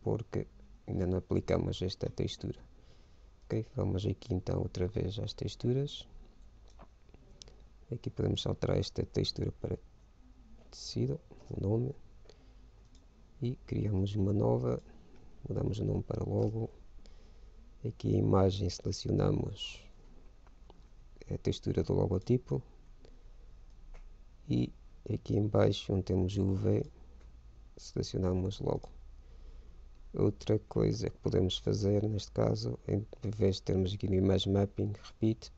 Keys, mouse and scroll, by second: 1.0 shift+z, 3.9-5.6 drag, 5.8-7.6 drag, 8.6-10.4 drag, 13.1-16.9 drag, 18.3 middle click, 19.1-21.0 drag, 24.3-25.8 drag, 27.2-28.8 drag, 32.1-33.8 drag, 35.4-35.5 drag.